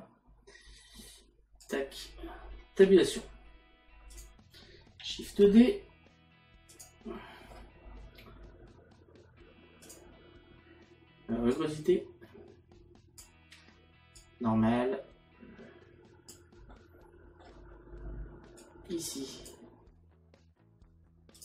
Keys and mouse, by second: 1.7 click, 2.7 Tab, 4.1 click, 6.7 click, 11.5 click, 16.8 middle click, 18.6 click.